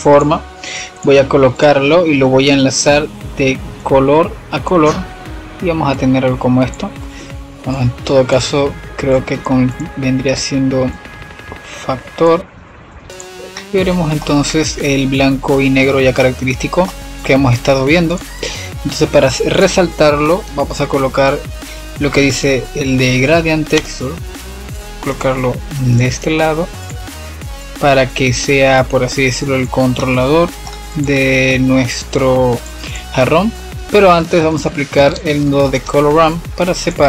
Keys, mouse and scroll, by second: 0.0 click, 0.9 click, 3.7-9.3 drag, 9.5-13.1 drag, 13.7-17.3 middle drag, 18.0 click, 18.8 shift+a, 25.8-26.9 drag, 27.5 click, 29.9 middle click, 30.8-32.9 drag, 34.1 shift+a.